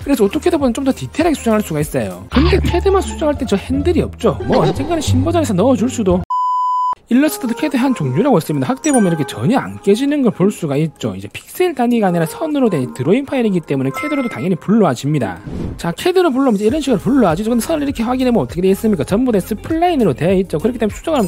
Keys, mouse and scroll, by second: 1.3-3.9 drag, 8.7 click, 9.3 alt+middle click, 9.9 alt+middle click, 10.2 alt+middle click, 10.4 space, 10.5 click, 11.0 click, 11.5 click, 12.2 click, 12.8-13.9 drag, 14.2 click, 14.7 click, 15.3 click, 18.3-18.6 scroll down 2, 19.3 click, 19.8-20.2 scroll up 2.